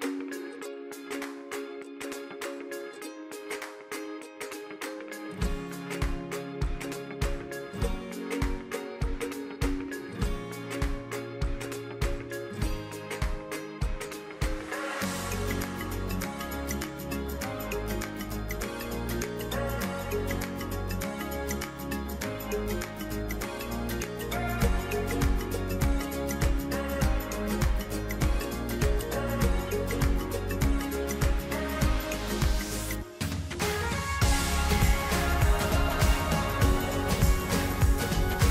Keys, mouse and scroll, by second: 1.0-9.9 drag, 15.0 click, 17.6 ctrl+alt+shift+Num_Lock, 17.6 click, 18.5 ctrl+alt+shift+e, 24.1 click, 29.7 click, 33.8-38.1 drag.